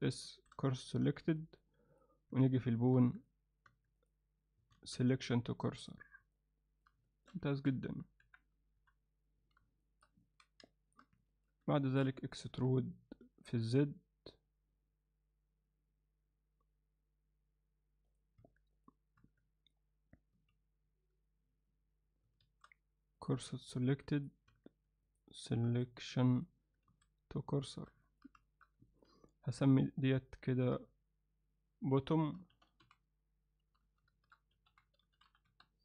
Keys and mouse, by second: 0.3 shift+s, 1.1 Tab, 1.4 alt+middle click, 1.9 click, 2.3 Tab, 4.0 click, 4.8 shift+s, 6.4 middle click, 7.1 shift+middle click, 7.6 ctrl+alt+middle click, 8.3 KP_1, 8.8 KP_3, 9.8 alt+shift+middle click, 10.3 ctrl+middle click, 10.7 alt+shift+middle click, 11.2 ctrl+alt+middle click, 11.8 shift+middle click, 12.6 e, 18.4 Tab, 18.8 click, 19.2 Tab, 20.4 a, 22.5 shift+s, 23.9 Tab, 24.2 click, 24.5 Tab, 25.1 click, 25.8 click, 26.3 click, 26.9 shift+s, 28.1 ctrl+middle click, 28.5 shift+middle click, 28.9 ctrl+alt+middle click, 29.7 click, 30.7 F2, 33.9 BackSpace, 35.0 t.